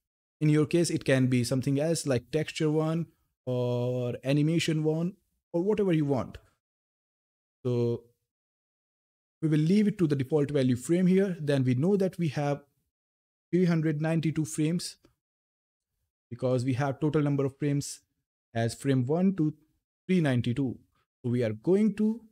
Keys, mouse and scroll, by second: 7.9 click, 12.0 click, 16.2 click, 17.6 scroll down 1, 18.4 scroll up 1, 18.7 scroll, 18.9 scroll down 1, 21.4 scroll down 1, 21.5 click.